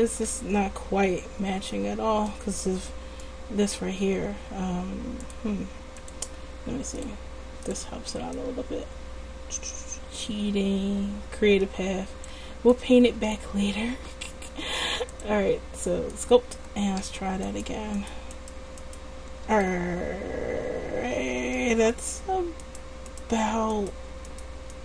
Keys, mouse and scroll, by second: 6.3 click, 6.9 middle click, 14.9 click, 17.5-19.7 right drag, 19.7 middle click.